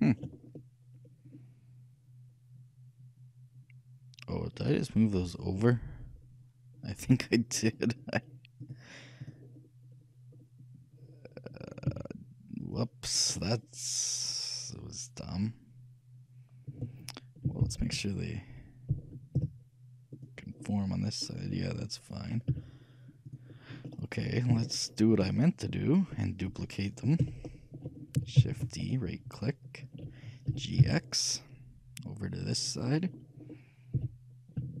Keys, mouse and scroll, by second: 8.7-10.6 drag, 10.4-11.6 middle drag, 12.0 z, 13.1-15.2 middle drag, 17.7 ctrl+KP_3, 20.3 z, 20.9-22.7 middle drag, 22.6 z, 24.0 middle click, 27.0-29.1 shift+middle drag, 28.5 shift+d, 30.6 g, 33.0-34.8 middle drag, 34.4 g.